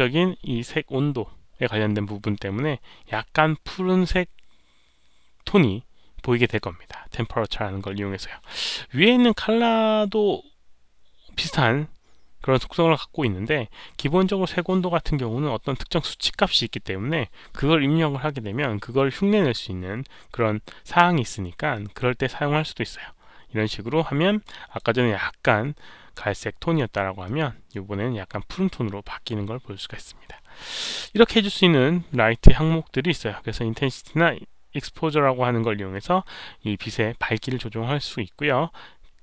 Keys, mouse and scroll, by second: 1.3 click, 1.3 click, 21.7-24.7 drag, 27.2-27.6 drag.